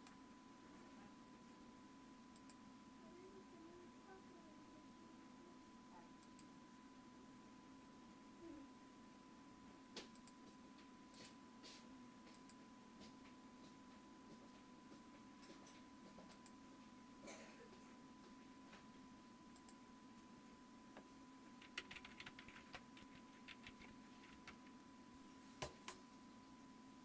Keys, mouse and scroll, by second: 0.0 right click, 0.1-3.2 drag, 6.7 click, 10.3-14.9 drag, 16.4-18.3 drag, 19.7-22.1 drag, 21.8-24.2 typing, 24.4 Return.